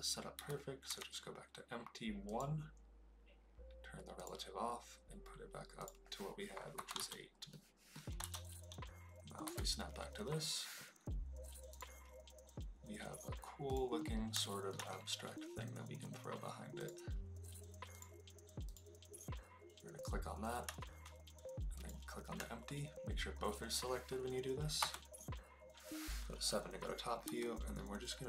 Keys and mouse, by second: 4.1 click, 5.7-7.0 drag, 7.5-7.9 middle drag, 8.1 KP_0, 9.4 KP_1, 13.6 click, 14.4 shift+middle drag, 16.7 click, 18.6 click, 21.7 shift+click, 24.7 KP_7, 27.3 g.